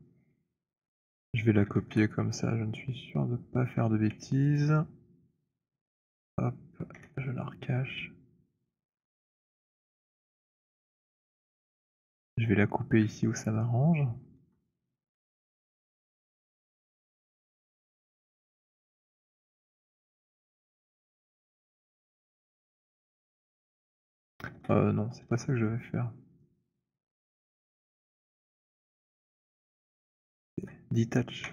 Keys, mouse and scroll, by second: 1.7 ctrl+d, 4.5 click, 5.4 click, 6.9 ctrl+h, 8.7-9.2 scroll, 10.1 click, 11.3 middle click, 11.6 middle click, 12.0 middle click, 13.9-14.3 alt+middle click, 16.0 alt+middle click, 18.9 right click, 20.0 click, 22.2 shift+right click, 23.3 w, 24.4 z, 25.2 z, 27.5 right click, 28.4 click, 30.7 click, 30.7 shift+right click, 31.3 w.